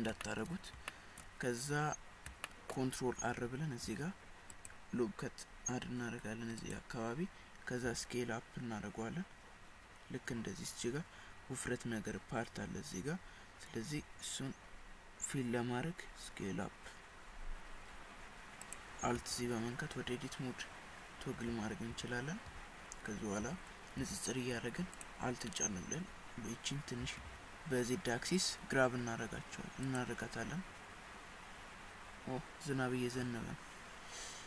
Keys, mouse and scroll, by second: 0.3 shift+middle click, 0.9 shift+middle click, 2.5 shift+middle click, 3.9 ctrl+r, 7.9 s, 19.2 alt+z, 21.5 alt+z, 21.9 alt+z, 22.5 alt+z, 23.4 alt+z, 24.0 alt+z, 25.0 alt+click, 27.0 g.